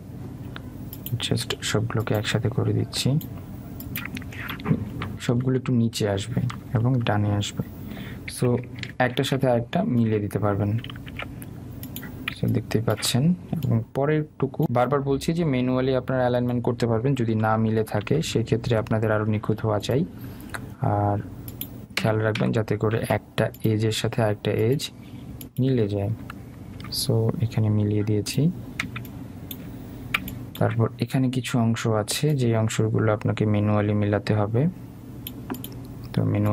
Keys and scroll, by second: 5.9 Down, 7.6 Right, 18.4 Down, 19.2 Left, 20.6 Right, 23.1 Down, 24.2 Left, 27.1 Right, 27.9 Down.